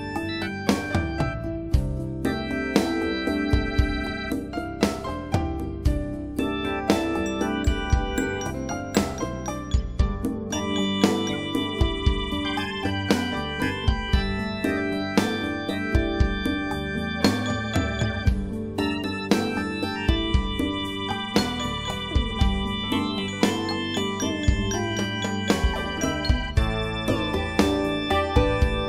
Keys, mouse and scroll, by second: 5.5 click, 8.4 click, 16.9 click, 22.0 click.